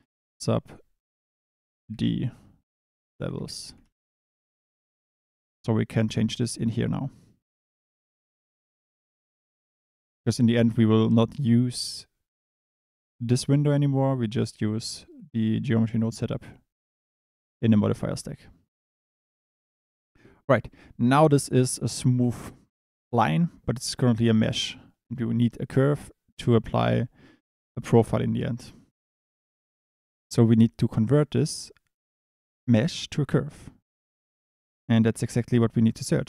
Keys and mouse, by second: 16.4 click, 17.9 click, 26.8 click, 30.7 click, 34.6 shift+a.